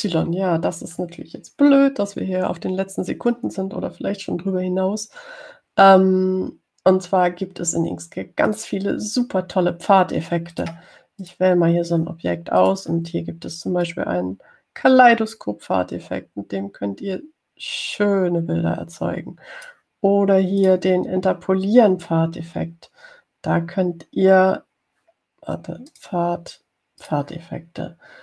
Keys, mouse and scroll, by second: 0.9 scroll down 2, 1.5 scroll up 2, 9.7 click, 11.8 click, 12.5 click, 13.8 click, 15.1-21.1 drag, 21.8 click, 27.2 click.